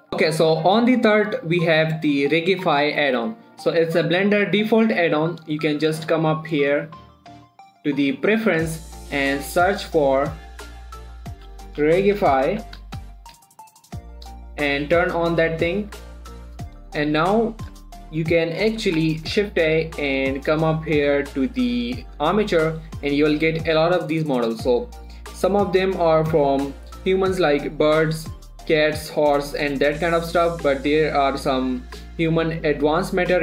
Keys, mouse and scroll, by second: 0.0 scroll down 1, 0.1 shift+middle click, 5.2 click, 12.1-13.7 typing, 14.3 click, 17.4 middle click, 20.0 shift+a.